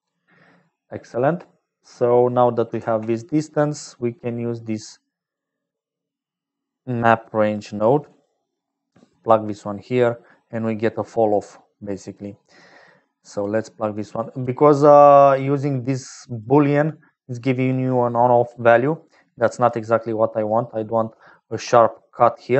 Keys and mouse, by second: 0.0-22.5 typing, 0.5 click, 1.4 click, 9.2 click, 10.5 click, 12.1-13.6 drag, 14.0 click, 15.2 click, 16.4-18.5 drag, 19.0 click, 21.7 click.